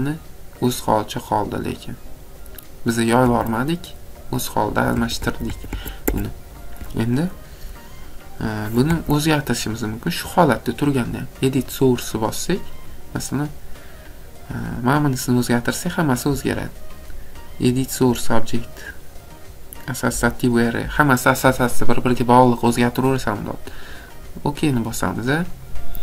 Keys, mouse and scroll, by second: 1.2 click, 1.7 click, 3.3 Escape, 3.9 scroll down 2, 4.3 scroll up 2, 4.7 Escape, 5.0 Escape, 5.0 scroll, 5.2 Escape, 5.5 Escape, 5.7 Escape, 6.0 Escape, 8.9 Escape, 9.5 click, 11.7 click, 12.8 scroll, 15.7 click, 24.1 click, 25.6-26.0 scroll.